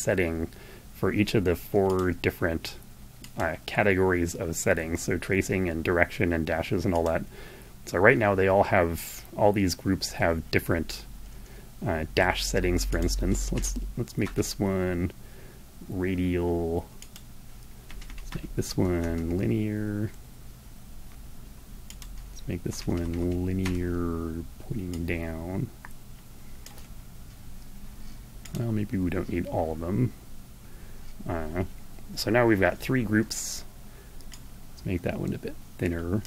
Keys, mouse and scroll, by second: 1.0 click, 2.4 click, 6.0 click, 12.1 click, 12.7 Right, 16.1 click, 16.9 Right, 17.8 Left, 18.2 Right, 21.0 click, 21.8 Right, 22.8 Left, 23.9-26.0 drag, 27.5 click, 33.2-35.6 drag.